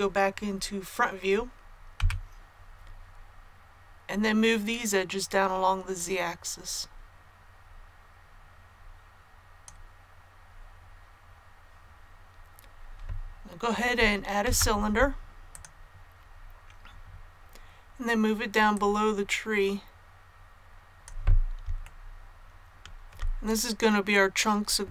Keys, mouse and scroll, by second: 1.9 KP_1, 3.2-3.8 scroll down 1, 5.9-10.4 drag, 14.4 shift+a, 15.4-21.4 drag, 21.8 shift+middle click, 22.0-22.4 scroll up 1, 22.4 scroll.